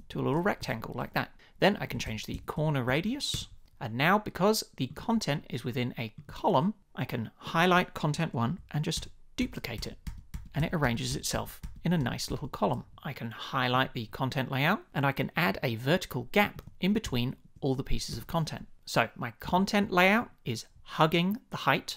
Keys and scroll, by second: 0.1 shift+Up, 0.6 Return, 2.1 shift+Up, 2.9 shift+Down, 3.3 Return, 9.0 super+d, 10.5 super+d, 14.9 Return, 17.1 shift+Up, 18.1 Return.